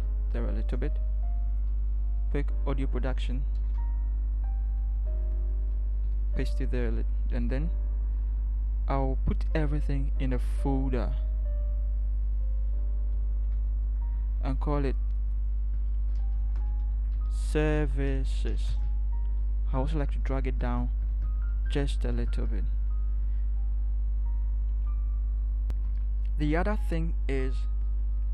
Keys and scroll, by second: 0.0 shift+Right, 3.6 ctrl+c, 6.1 ctrl+v, 13.5 ctrl+shift+g, 18.6-19.4 typing, 19.9 Down, 20.1 Down, 20.3 Down, 21.1 Down.